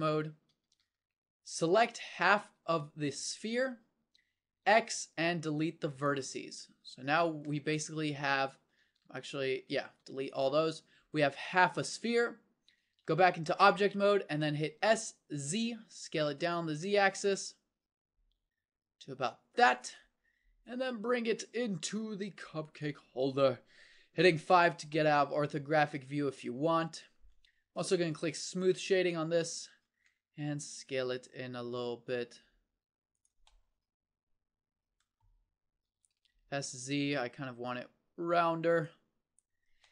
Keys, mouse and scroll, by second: 0.3 a, 0.6 z, 2.4 b, 4.6 x, 8.8 ctrl+z, 9.8 x, 13.1 Tab, 14.8 s, 24.4 KP_5, 25.7 z, 29.9 s, 33.5-35.7 middle drag, 35.8 s, 39.8 middle click.